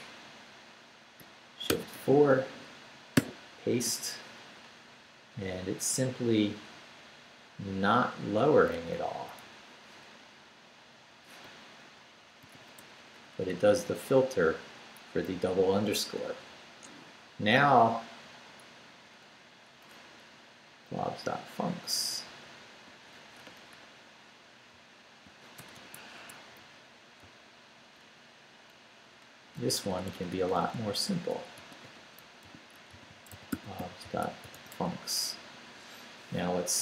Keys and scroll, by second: 1.7 shift+4, 2.3 shift+Up, 3.0 Up, 3.1 p, 4.9 Left, 8.7 Left, 10.7 BackSpace, 11.5 Right, 12.4 i, 12.8 BackSpace, 15.1 Down, 16.8 Right, 18.6 Right, 22.3 x, 24.7 x, 25.6 BackSpace, 26.2 Home, 26.6 Right, 27.2 x, 29.7 x, 32.2-35.2 typing, 36.6 Down.